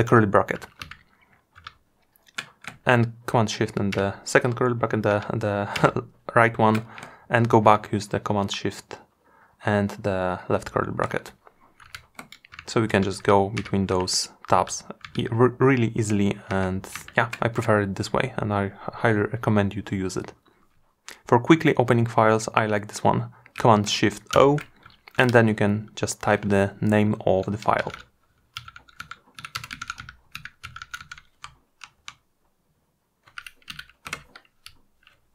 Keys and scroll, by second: 4.7 shift+super+], 23.3 shift+super+o.